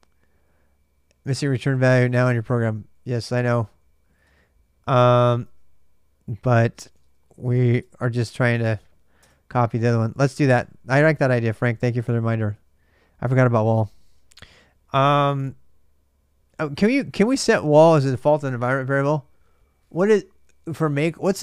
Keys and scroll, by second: 2.4-8.4 typing, 8.4 Tab, 9.0 Return, 9.6-12.3 typing, 16.4 ctrl+[, 16.4 ctrl+j, 16.5-17.4 typing, 17.3 ctrl+[.